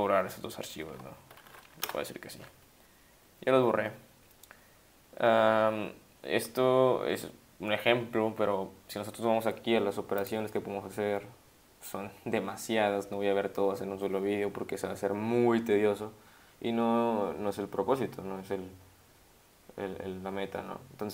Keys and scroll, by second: 1.1-2.0 typing.